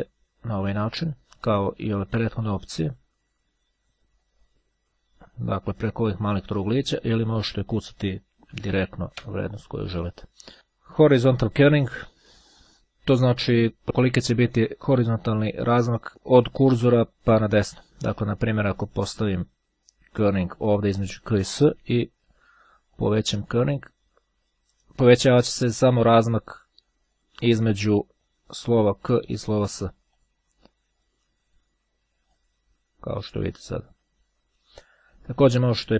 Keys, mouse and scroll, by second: 2.9-7.0 drag, 8.7 KP_1, 9.0 KP_Enter, 20.1 click, 22.8-26.6 drag, 30.2 click, 32.4-34.8 drag, 35.8 click.